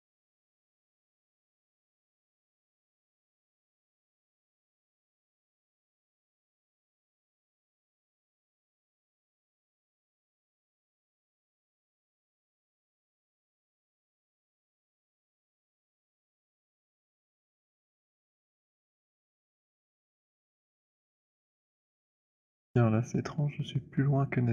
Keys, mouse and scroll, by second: 0.7 shift+click, 6.6 click, 8.8 right click, 9.9 click, 13.9 click, 16.2 click, 21.9 click.